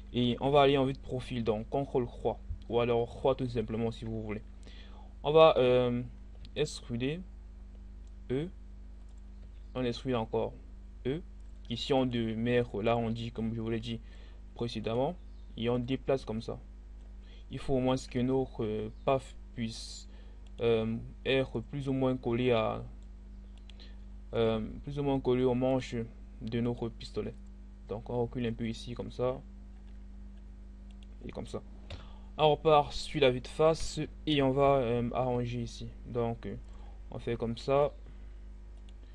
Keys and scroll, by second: 6.0 e, 31.5 1, 35.4 g.